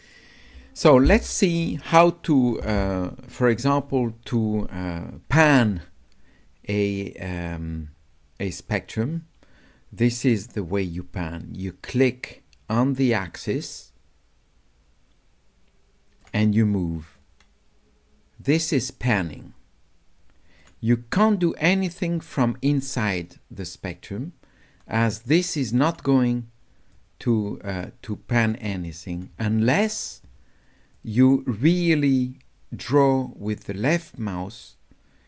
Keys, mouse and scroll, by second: 10.4-16.2 drag, 17.2-20.6 drag, 18.1-18.6 scroll up 1, 18.7-19.3 scroll up 1, 19.3 scroll down 1, 19.6-19.9 scroll up 1, 19.9 scroll down 1, 20.1 scroll up 1, 24.8-25.8 drag, 26.9-28.4 drag, 31.0-35.2 drag.